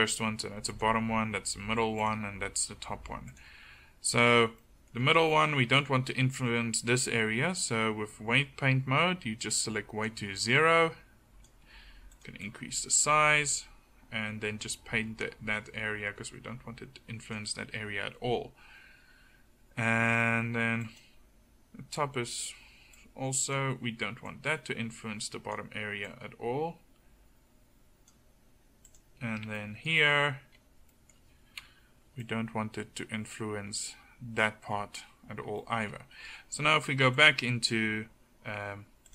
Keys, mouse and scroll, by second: 4.2-5.1 drag, 11.7 f, 23.9-25.8 drag, 30.1-31.0 middle drag, 31.6 KP_1, 38.2 click.